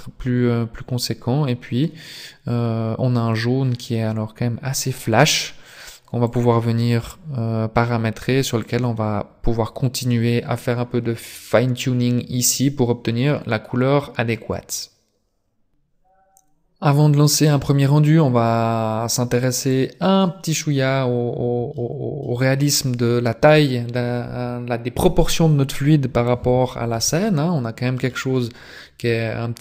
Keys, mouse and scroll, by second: 19.8 click, 20.5-21.5 scroll down 5, 21.6 scroll up 1, 21.8 shift+middle click, 22.8 scroll up 2, 23.0 scroll down 1, 27.0 middle click, 28.3 middle click.